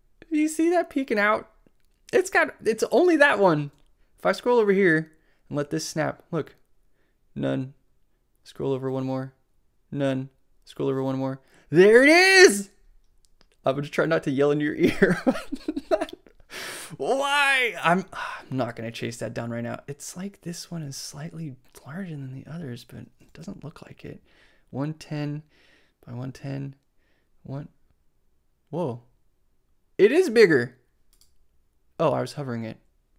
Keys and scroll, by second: 23.3 shift+super+c.